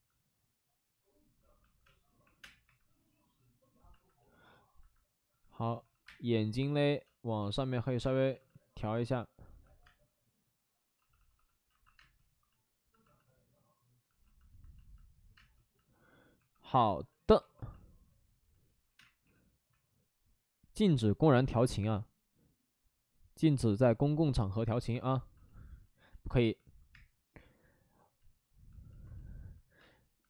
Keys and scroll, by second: 0.4 ctrl+z, 0.8 ctrl+z, 1.8 space, 2.2 3, 2.3 space, 2.6 3, 5.4 shift+d, 5.6 shift+d, 5.8 shift+d, 6.0 space, 7.0 space, 7.3 ctrl+z, 8.0 space, 8.3 alt+s, 9.8 space, 10.9 d, 11.1 d, 11.3 d, 11.6 alt+s, 11.9 space, 15.3 space, 16.3 2, 17.3 2, 18.8 5, 18.8 6, 18.9 space, 19.2 5, 26.9 space, 29.9 space.